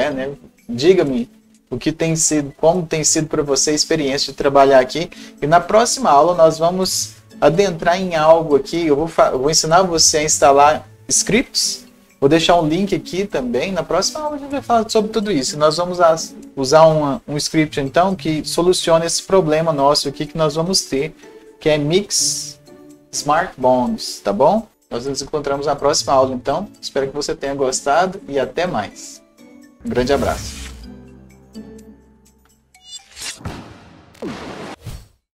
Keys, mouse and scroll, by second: 20.6 click.